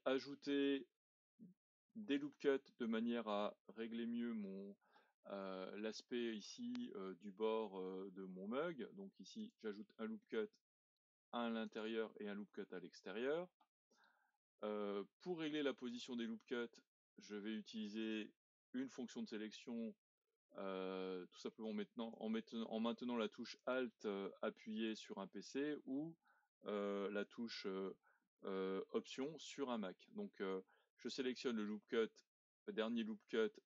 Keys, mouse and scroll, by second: 0.0-3.1 middle drag, 9.5-14.7 drag, 15.9-19.0 drag, 23.6 alt+click.